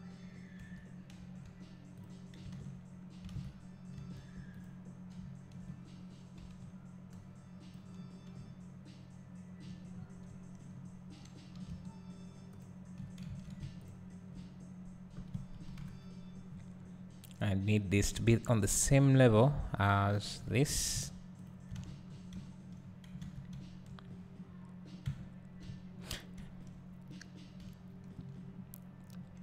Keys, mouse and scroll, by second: 0.0-0.6 scroll down 1, 0.6 1, 1.9 z, 2.0 click, 3.3 alt+a, 4.6 alt+click, 7.7 b, 10.0 scroll up 1, 12.6 alt+shift+click, 13.3 ctrl+z, 13.9 alt+shift+click, 15.8 KP_1, 16.5 scroll down 1, 17.8-21.5 drag, 20.6 Tab, 22.2 scroll down 1, 22.3 `, 22.8-23.5 scroll up 1, 23.5 `, 24.0-24.4 scroll down 1, 24.4-25.1 scroll up 1, 25.1 Tab, 25.6 `, 29.0 scroll up 1.